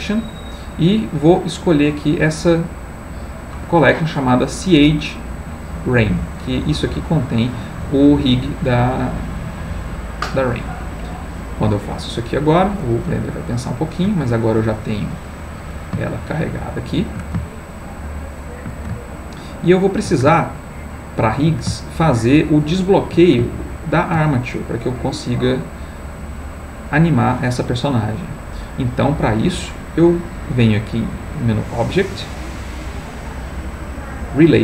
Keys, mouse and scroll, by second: 6.4 click, 9.8 click, 13.3-21.7 ctrl+middle drag, 22.6-24.9 shift+middle drag, 26.3-28.9 middle drag, 31.4 click.